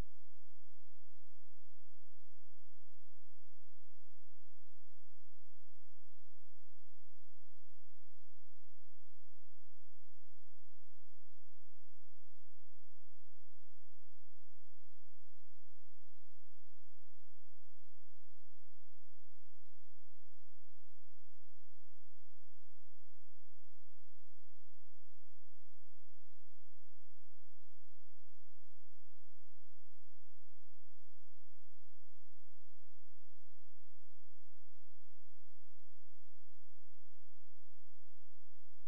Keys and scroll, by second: 17.2 space, 34.2 Escape.